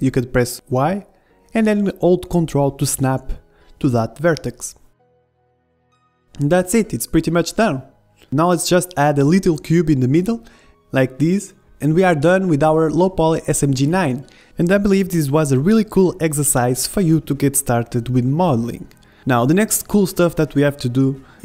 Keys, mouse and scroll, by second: 4.5-6.3 middle drag, 4.9 z, 6.3 click, 6.4-7.9 middle drag, 7.3 z, 7.8 KP_1, 8.8 middle click, 9.1-10.5 drag, 9.3 shift+a, 10.5 s, 11.8-15.2 typing, 12.3 middle click, 12.3 middle click, 14.4 click, 14.7 Tab, 14.9 Tab, 16.4 Tab, 16.5 a, 16.6-18.1 drag, 16.8 n, 17.0 n, 17.1 b, 18.8 Tab, 19.1 middle click, 19.2 z, 19.9 Tab, 20.2 click, 20.5 Tab, 20.6 z, 20.8 z, 20.9-21.4 middle drag, 21.0 a.